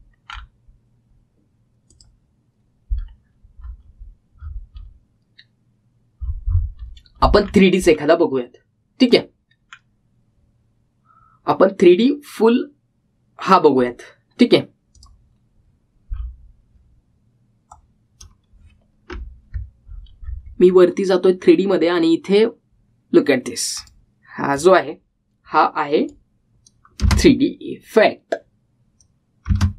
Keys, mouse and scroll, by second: 3.0 click, 4.2-4.9 scroll up 1, 8.5-9.2 scroll down 1, 10.3 click, 10.8 scroll down 1, 16.2 click, 17.3-18.8 scroll up 1, 18.8-21.0 drag, 21.0-21.7 scroll up 1, 24.9-28.2 drag, 28.2 space.